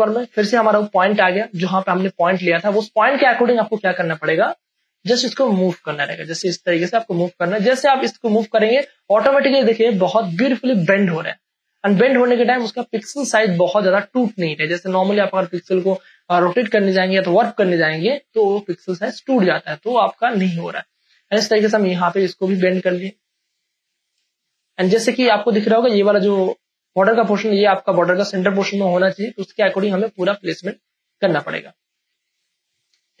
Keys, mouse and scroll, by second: 2.8 space, 3.0-8.9 ctrl+drag, 8.8 space, 9.1-17.0 ctrl+drag, 17.0 space, 17.4 ctrl+click, 21.2-24.2 drag, 24.2 space, 24.7 space, 25.1-28.7 ctrl+drag, 28.7 space, 29.0-33.2 ctrl+drag.